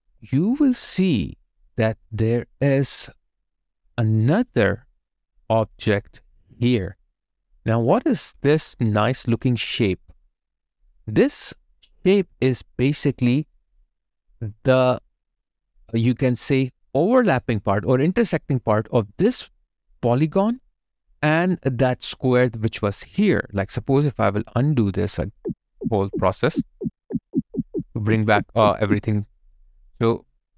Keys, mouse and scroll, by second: 0.2 alt+right click, 0.9 alt+click, 1.7 alt+right click, 2.1 alt+middle click, 2.7 alt+click, 5.7 alt+click, 5.9 alt+right click, 8.3 alt+click, 11.2 alt+right click, 11.5 alt+click, 12.8 alt+right click, 13.4 alt+middle click, 13.9 alt+click, 25.2 ctrl+z.